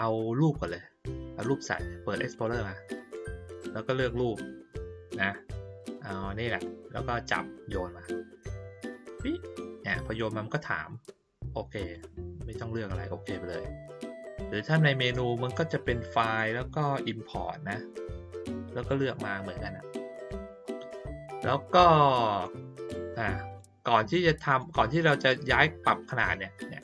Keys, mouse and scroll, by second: 2.3 click, 6.6-8.8 drag, 11.8 click, 13.9-14.4 drag, 15.7 click, 20.2 click, 21.6 click, 22.4-23.5 drag, 24.5 click.